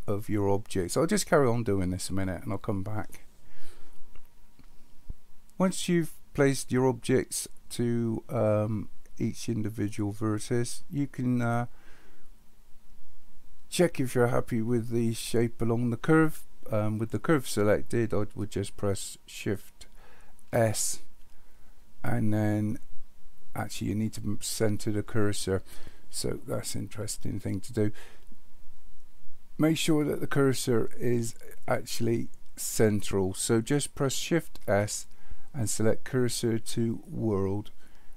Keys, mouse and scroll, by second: 20.5 shift+s, 34.6 shift+s.